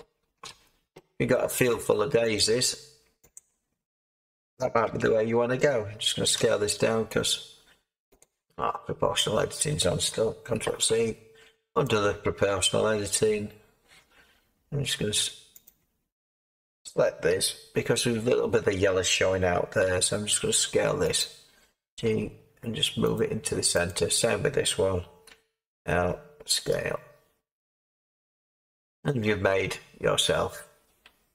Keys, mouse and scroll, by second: 1.7 Tab, 4.8 l, 6.3 space, 6.3 s, 10.6 ctrl+z, 17.2 l, 19.8 s, 22.0 g, 25.3 l, 26.7 s, 28.5 Tab.